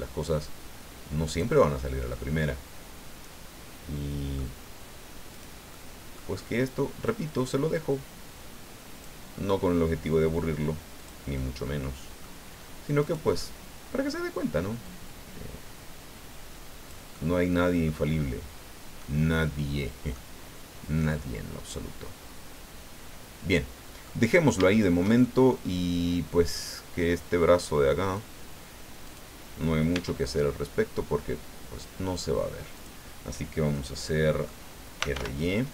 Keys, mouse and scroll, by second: 1.6-4.5 drag, 5.3 right click, 5.7 middle click, 7.0-9.2 drag, 11.0 click, 11.3-12.4 middle drag, 13.0 right click, 13.4 middle click, 14.8-17.1 drag, 17.1 click, 18.1 scroll down 1, 19.0-20.3 drag, 20.5 scroll up 1, 21.1-24.2 drag, 24.7 shift+middle click, 25.2-26.7 shift+middle drag, 28.0 click, 29.0 right click, 29.9 e, 32.7 click, 33.7 click, 34.7-35.6 typing.